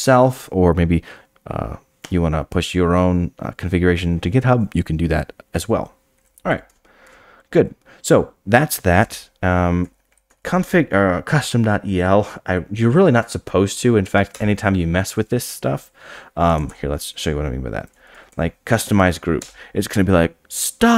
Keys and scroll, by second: 7.0 Tab, 14.1-14.9 typing, 19.6 Return.